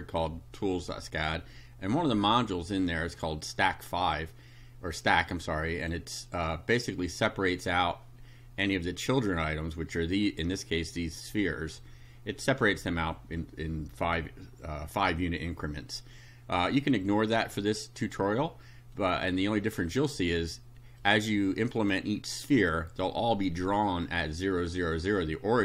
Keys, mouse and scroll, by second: 2.8-4.3 drag, 5.8 click, 16.6-18.2 drag, 19.0-20.1 drag, 21.0-22.1 drag.